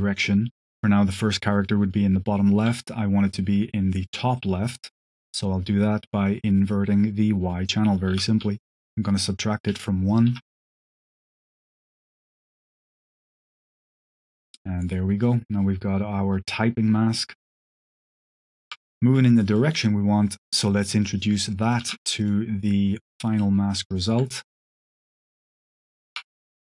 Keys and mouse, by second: 4.2 middle click, 5.1 middle drag, 5.7 click, 8.0 q, 9.4 click, 10.0 click, 10.7-11.5 drag, 11.6 click, 12.5 click, 13.8-18.6 shift+drag, 19.5 click, 20.1 click, 20.9 click, 21.5 click, 21.8 shift+d, 22.1 click, 22.5-23.3 drag, 23.8 alt+click, 24.5-25.6 drag.